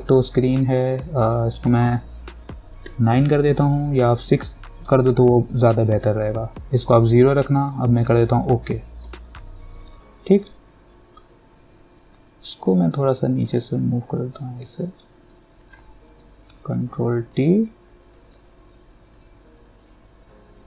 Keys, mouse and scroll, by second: 3.1 9, 4.2 click, 5.1 6, 7.0 click, 9.6 ctrl+-, 12.9-16.3 drag, 16.3 ctrl+t, 17.5-20.6 shift+drag.